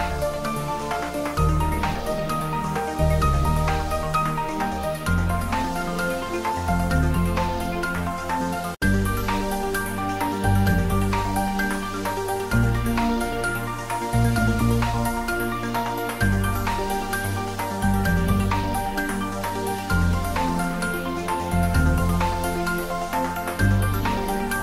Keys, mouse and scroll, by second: 0.3 s, 1.2 click, 1.4 scroll down 1, 1.6 middle click, 2.2 Tab, 3.1 click, 4.6 shift+click, 5.2 s, 6.2 click, 6.7 scroll down 1, 7.1 middle click, 8.1 scroll up 1, 8.7 click, 9.2 g, 9.7 Left, 10.5 click, 10.6 click, 11.0 scroll up 1, 11.2-14.6 middle drag, 14.6-15.5 scroll down 1, 17.3 click, 18.1 s, 18.9 click, 20.2 g, 21.5 click, 21.7 shift+z, 22.6 g.